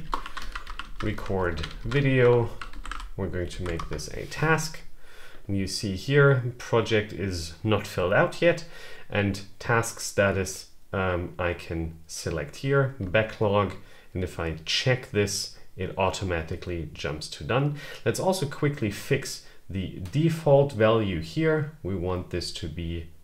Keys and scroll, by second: 0.0-3.2 typing, 3.3 Down, 3.6 Return.